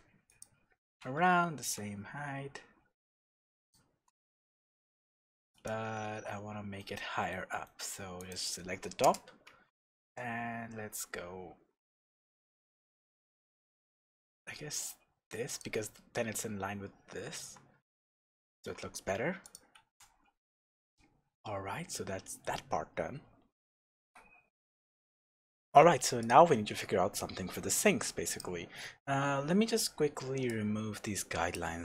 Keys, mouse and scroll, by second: 0.4 click, 0.8 s, 3.7 shift+click, 4.3-5.5 shift+middle drag, 5.5 click, 5.7 middle click, 6.0 alt+a, 6.8-8.2 middle drag, 8.2 click, 9.0 KP_0, 10.0 g, 15.6 click, 17.8 Tab, 18.2-18.6 scroll down 1, 18.6-19.4 scroll up 1, 19.4 click, 19.8 shift+z, 21.6-22.3 scroll down 1, 23.9 ctrl+alt+r, 23.9-24.4 scroll up 1, 28.2 click, 28.7-29.1 scroll down 1, 29.1-29.5 scroll up 1, 29.5-30.4 scroll down 1, 30.4-31.8 drag.